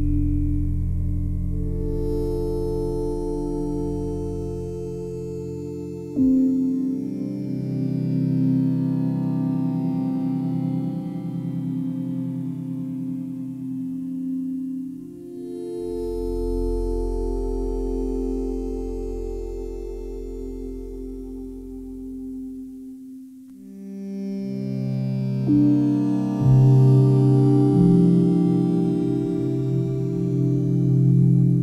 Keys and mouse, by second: 0.6-1.7 ctrl+alt+drag, 1.9 alt+click, 2.5 ctrl+alt+click, 2.9-5.8 ctrl+alt+drag, 6.3 alt+click, 6.8-8.8 alt+drag, 7.2 typing, 8.9-9.6 typing, 10.3 click, 11.5 click, 12.4 click, 12.9-16.6 alt+drag, 15.4 typing, 16.6 typing, 18.2-20.2 drag, 18.9 typing, 20.2-22.5 typing, 21.6-24.2 alt+drag, 23.7-24.4 typing, 25.6 click, 26.8 g, 27.0 y, 28.0 click, 28.3 alt+click, 29.2 ctrl+alt+click, 29.7 ctrl+alt+click, 30.0 typing, 30.4 click, 31.2 click.